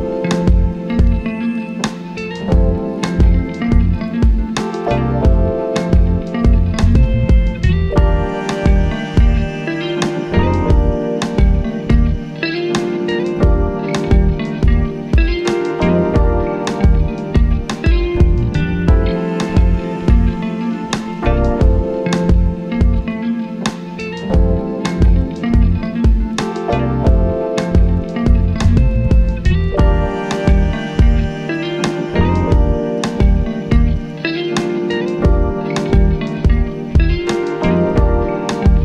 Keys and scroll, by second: 0.9 4, 14.8 h, 17.0 h, 20.2 h, 22.2 h, 27.8 1, 29.8 ctrl+z, 30.4 4, 32.0 1, 33.4 4, 35.1 1, 36.2 4.